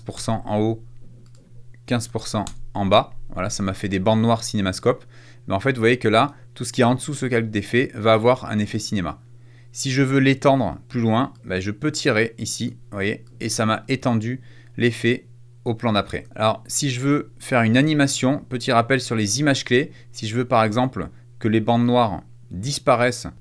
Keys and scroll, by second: 0.0-0.3 typing, 1.6-2.5 typing.